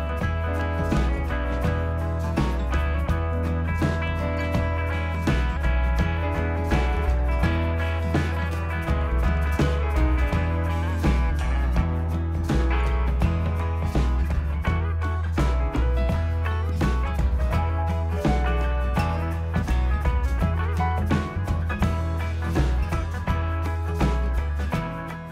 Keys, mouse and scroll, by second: 0.0 click, 1.1 click, 1.6 click, 2.3-3.0 typing, 4.2 click, 6.7 click, 7.9 click, 8.8 click, 12.6 click, 16.9 click, 19.7 click, 21.5 click, 22.6 click, 23.3 click, 24.9 click.